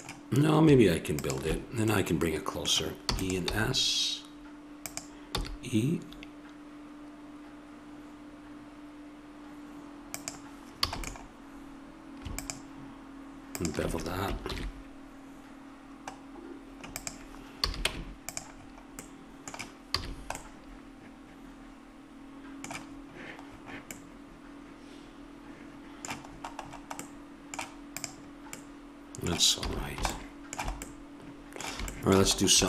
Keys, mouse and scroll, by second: 1.1-2.9 drag, 3.1 e, 3.5 s, 5.3 e, 10.8 a, 11.0-12.4 middle drag, 12.4-14.0 right drag, 14.0 click, 14.5 ctrl+b, 17.6 a, 17.9 Tab, 19.9 a, 22.3-23.9 middle drag, 28.0-29.6 drag, 29.6 a.